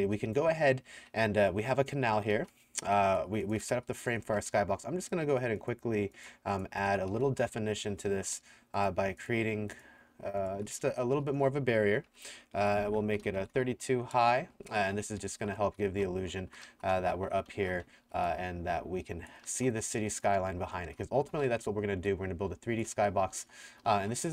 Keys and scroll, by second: 0.0-4.7 typing, 7.2 s, 7.5 w, 8.2 w, 10.9-13.5 typing, 14.6-21.7 typing, 22.9-24.3 typing.